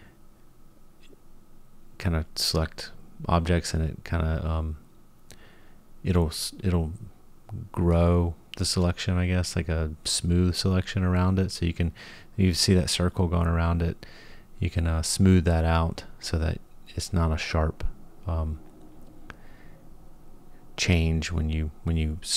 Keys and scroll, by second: 6.0 g.